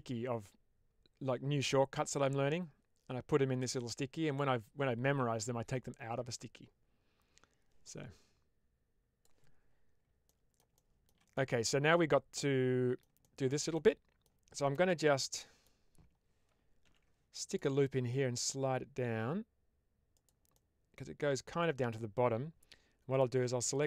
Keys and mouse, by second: 10.2 middle click, 10.7 shift+middle click, 11.3 middle click, 12.3 middle click, 13.2 shift+middle click, 13.7 middle click, 14.8 middle click, 16.7 ctrl+r, 20.0 click, 20.5-21.8 middle drag, 23.0 click, 23.6 shift+click.